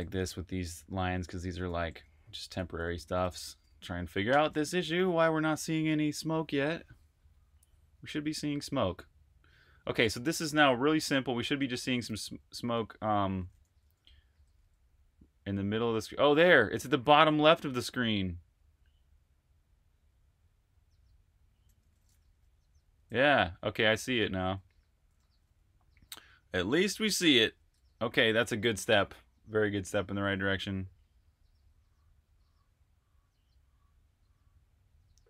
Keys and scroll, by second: 0.2-6.0 typing, 9.5 r, 12.0-14.9 typing, 21.6-27.7 typing.